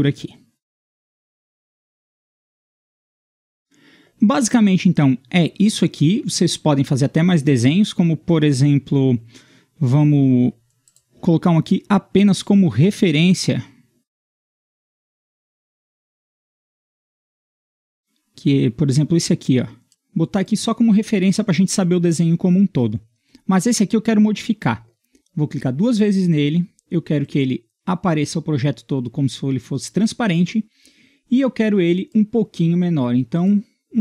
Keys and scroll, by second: 14.7 Escape, 17.3 Escape, 20.8 Escape.